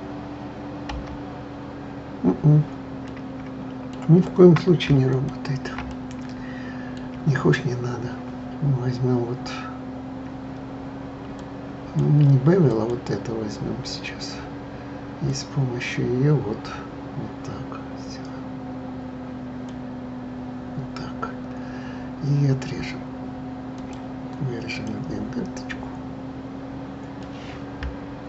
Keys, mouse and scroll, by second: 0.9 i, 3.0-5.1 middle drag, 5.1 shift+click, 5.9-8.9 middle drag, 11.4 click, 12.7-14.2 drag, 15.3 click, 19.6 click, 23.7-26.8 drag, 27.2-28.2 middle drag.